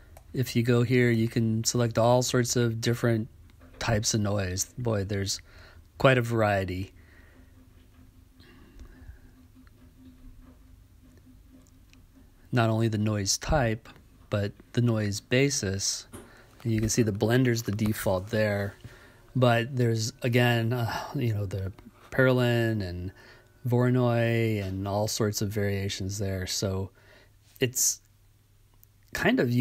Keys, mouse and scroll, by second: 1.2-5.5 drag, 7.2-8.9 drag, 9.8 click, 11.0-12.8 drag, 14.2-16.5 drag, 18.3-20.1 drag, 23.5 right click, 24.9 click, 27.4-29.3 drag.